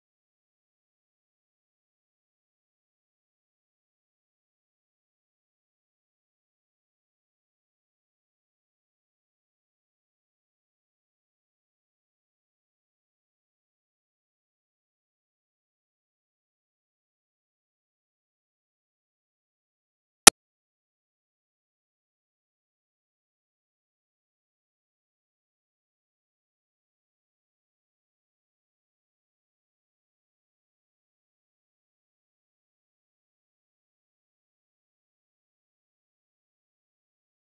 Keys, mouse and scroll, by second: 0.3 click, 0.7 scroll down 2, 1.0 scroll up 1, 1.1 shift+f, 11.4 Tab, 11.5 middle click, 11.6 scroll down 1, 11.8 KP_0, 12.1 scroll up 5, 12.2 shift+middle click, 13.0 scroll up 5, 13.2 shift+middle click, 13.5-13.9 scroll down 7, 13.9 scroll up 1, 14.0 shift+middle click, 14.5-17.2 shift+middle drag, 19.6 middle click, 19.8 shift+f, 20.2 click, 20.9-21.3 drag, 21.3 shift+f, 21.9 click, 23.0 click, 23.4 scroll down 1, 23.6 shift+f, 24.0 ctrl+b, 24.3 z, 25.7 click, 26.4 0, 26.9-28.8 drag, 28.8 KP_Decimal, 29.7 click, 30.3 scroll down 5, 30.3 scroll up 1, 30.6 scroll down 4, 31.1 ctrl+alt+b, 31.5 scroll down 1, 31.7 z, 32.0 click, 32.6 0, 32.9 click, 33.8 0, 34.0 click, 34.7 Delete, 35.0 click, 35.3 shift+middle drag, 35.5-37.3 drag, 37.3 shift+middle click.